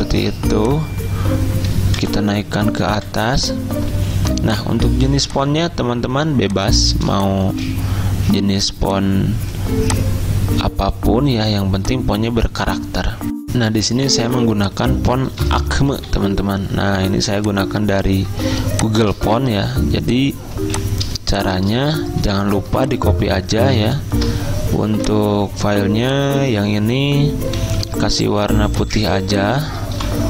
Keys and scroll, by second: 2.1 alt+Up, 2.2 alt+Up, 2.4 alt+Up, 2.9 alt+Up, 13.4 alt+Tab, 15.3-16.6 typing, 18.7 z, 25.1 v, 27.9 d, 28.6 z, 30.0 v.